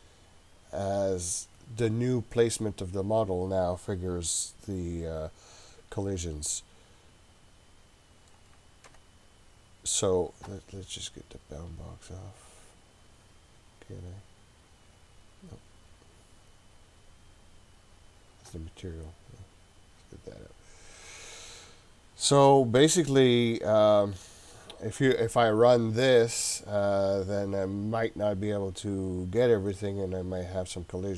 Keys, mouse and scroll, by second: 5.6-8.4 middle drag, 8.9 KP_7, 12.1-12.9 scroll up 2, 12.9-13.9 scroll up 1, 14.7 click, 15.5 click, 19.3 click, 21.4 click, 23.1-23.8 scroll up 4, 23.8-24.9 scroll down 2, 26.9-30.2 scroll up 9, 30.3-31.1 scroll down 1.